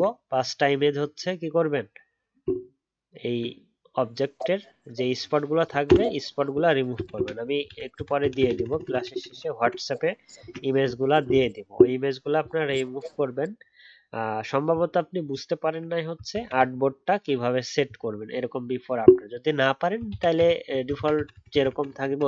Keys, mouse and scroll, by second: 2.4-3.0 alt+scroll up 2, 3.0-6.1 alt+scroll down 1, 7.1 ctrl+z, 7.6 ctrl+z, 7.9 ctrl+z, 8.2 ctrl+z, 8.5 ctrl+z, 8.7 ctrl+z, 8.9 ctrl+z, 9.0 ctrl+z, 9.2 ctrl+z, 9.6 ctrl+z, 10.3 ctrl+d, 11.3-11.7 alt+scroll down 1, 15.5-16.3 alt+scroll up 1, 20.1 ctrl+z, 20.3 ctrl+z, 20.9 ctrl+z, 21.1 ctrl+z, 21.5 ctrl+z, 21.7 ctrl+z, 22.0 ctrl+z, 22.2 ctrl+z.